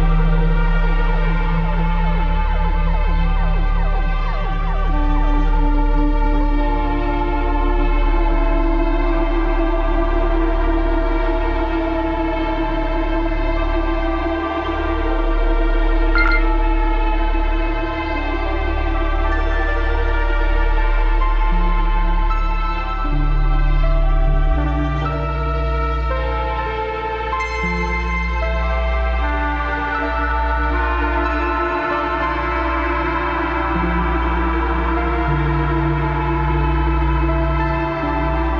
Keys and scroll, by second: 0.4-1.4 typing, 1.8 ctrl+KP_Subtract, 2.4 ctrl+KP_Subtract, 9.3 ctrl+z, 9.5 ctrl+z, 11.0 ctrl+z, 12.3 ctrl+d, 14.1 ctrl+KP_Add, 14.5 Return, 21.8 typing, 23.3 ctrl+j, 24.0 ctrl+z, 24.5 ctrl+shift+x, 24.7 ctrl+shift+v, 24.9 ctrl+shift+z, 25.6 shift+x, 25.9 ctrl+c, 26.0 ctrl+v, 26.2 ctrl+z, 26.4 ctrl+j, 26.9 b, 30.2 b, 31.7 ctrl+d, 32.1 ctrl+KP_Subtract, 33.0 Delete, 36.0 space, 36.2 ctrl+KP_Subtract, 36.7 ctrl+KP_Add, 36.9 space, 37.0 ctrl+KP_Add, 37.2 space, 37.6 ctrl+z, 38.2 ctrl+z.